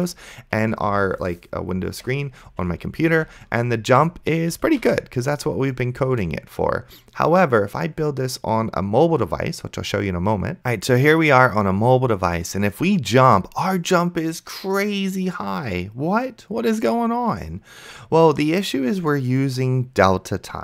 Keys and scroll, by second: 4.8 a.